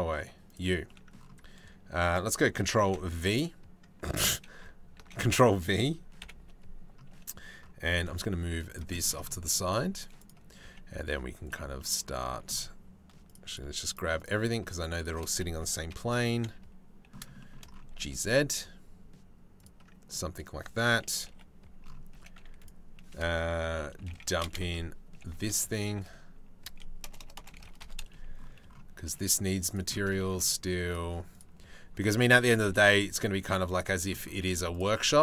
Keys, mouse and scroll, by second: 0.5 middle click, 2.5 ctrl+g, 4.8 ctrl+v, 5.8 KP_7, 7.7 g, 8.5 shift+middle click, 9.8 click, 10.3 g, 11.4 click, 12.9 shift+click, 13.1 shift+click, 13.5 shift+click, 14.6 shift+click, 15.5 KP_Decimal, 16.1 KP_3, 17.0 shift+click, 17.5 g, 20.9 KP_7, 21.8 g, 23.6 r, 24.2 KP_Subtract, 24.4 KP_Enter, 25.1 r, 28.7 g, 29.8 shift+middle click, 30.5 click, 31.2 g, 32.3 r, 33.0 g, 34.4 click, 34.9 g.